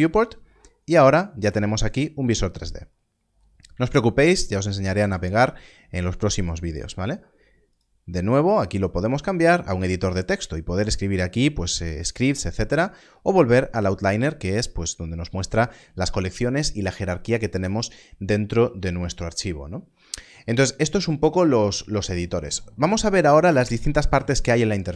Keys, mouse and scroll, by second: 1.2 middle click, 3.9 shift+middle click, 4.5-4.9 scroll up 1, 5.1 shift+middle click, 7.7 click.